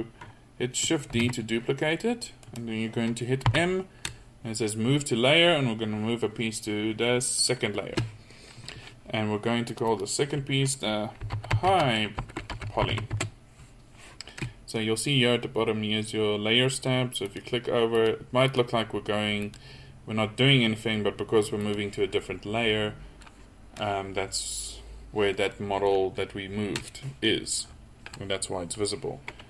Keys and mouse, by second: 1.2 shift+d, 3.5 m, 9.7-11.7 drag, 17.3 click, 22.2-24.2 middle drag, 27.7 middle click.